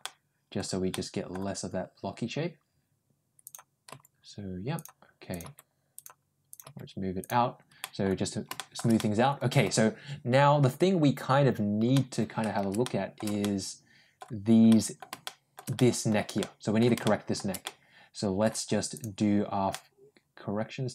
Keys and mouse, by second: 0.7 middle click, 3.7 g, 5.2 click, 5.3 g, 6.3 click, 7.0 g, 7.6 middle click, 8.4 shift+middle click, 8.8 middle click, 11.8 middle click, 12.7 shift+middle click, 13.3 middle click, 14.5 middle click, 15.1 shift+middle click, 15.6 middle click, 16.2 middle click, 16.9 shift+middle click, 17.5 middle click, 18.8 click, 19.6-20.9 middle drag.